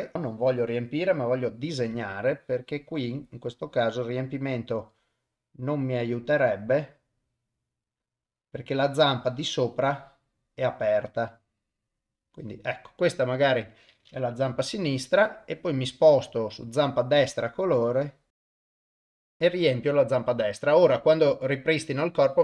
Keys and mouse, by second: 1.0 click, 2.3-12.2 drag, 14.5 y, 17.7-19.3 drag, 21.3 click.